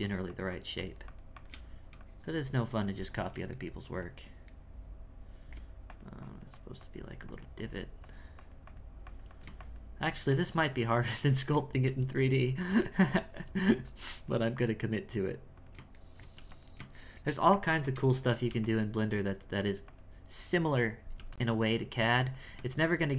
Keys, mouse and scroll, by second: 3.6-5.9 shift+middle drag, 5.9-11.8 drag, 12.6 click, 13.9-16.0 drag, 16.0 shift+middle click, 17.0-18.5 shift+middle drag, 19.0-21.1 drag, 21.7-23.1 drag.